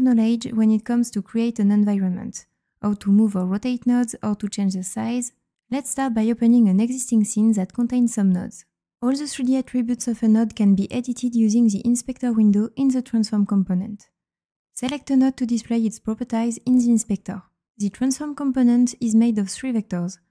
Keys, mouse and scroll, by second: 15.6 click.